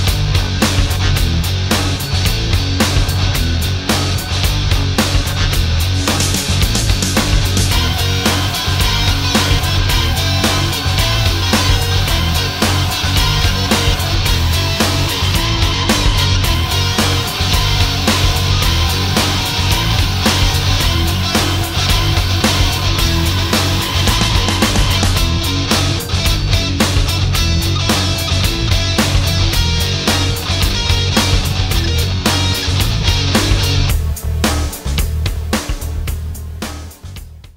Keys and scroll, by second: 4.9 space, 14.0 ctrl+shift+a, 15.3 space, 24.6 ctrl+shift+a, 26.8 space, 29.4 alt+space, 31.3 ctrl+space.